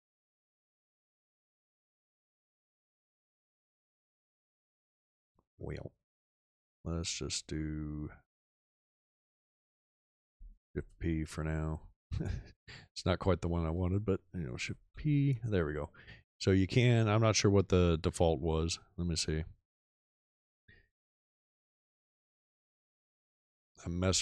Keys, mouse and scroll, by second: 10.7 shift+p, 14.8 shift+p.